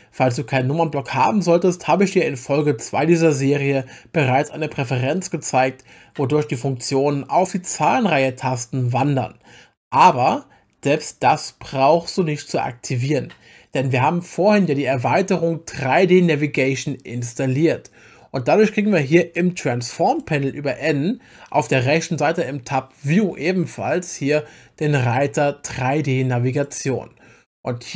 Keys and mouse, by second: 20.1 click, 20.3 n, 20.7 n, 23.0 click, 26.5 click.